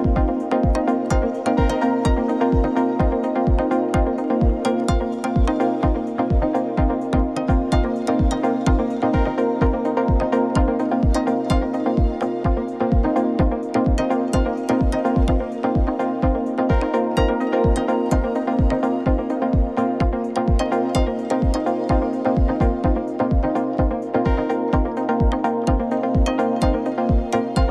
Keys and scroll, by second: 0.1 shift+Right, 1.3 shift+Left, 10.7 ctrl+c, 10.9 ctrl+v, 12.4 ctrl+-, 26.3 ctrl+shift+x, 27.0 ctrl+x, 27.3 ctrl+shift+v.